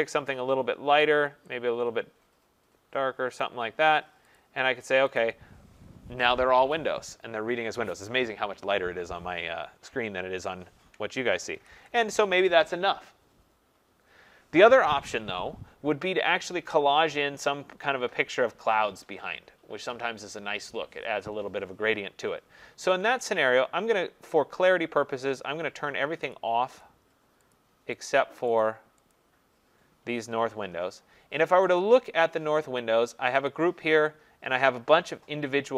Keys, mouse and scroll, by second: 1.0 click, 3.4 click, 4.4 click, 5.2 click, 10.9 click, 11.6 ctrl+-, 26.4 click, 26.8 click, 28.1 click, 28.6 click, 29.1 click, 31.8 click, 33.5 click.